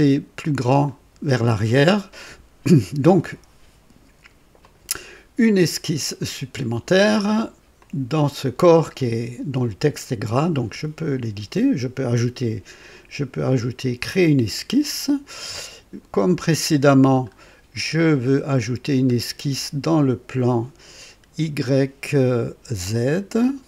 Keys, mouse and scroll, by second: 0.8 click, 4.5 click, 6.2 click, 7.7 click, 15.0 click, 17.2-18.1 scroll down 4.